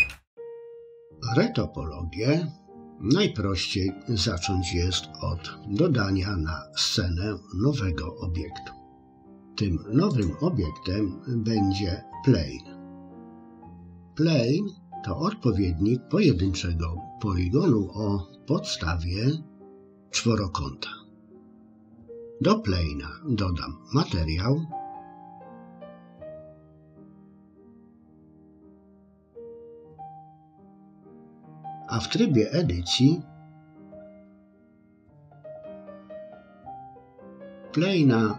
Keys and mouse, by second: 10.1-13.3 drag, 14.0 middle click, 24.8 click, 25.8 click, 27.7 click, 30.8 click, 33.5 Tab, 36.3 KP_3.